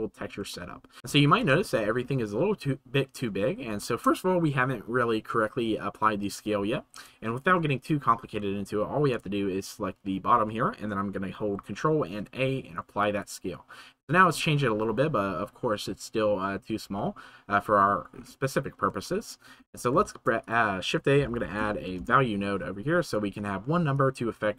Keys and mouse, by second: 0.5 shift+middle click, 1.0 ctrl+s, 1.5 shift+middle click, 3.9 shift+middle click, 10.5 shift+middle click, 12.0 ctrl+a, 17.1 click, 19.1 shift+right click, 23.9 click.